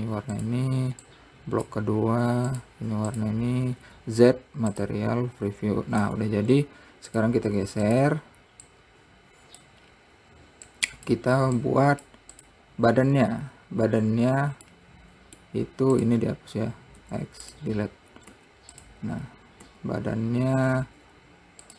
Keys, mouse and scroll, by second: 0.2 click, 0.9 click, 3.1 click, 3.7 click, 4.3 z, 6.6 Tab, 7.1 scroll down 2, 7.7 click, 8.5 click, 10.4 scroll down 2, 11.3 click, 12.2 click, 12.9 click, 13.7-15.3 scroll up 1, 15.3-16.5 middle drag, 16.5 click, 17.6 x, 19.8 scroll up 3.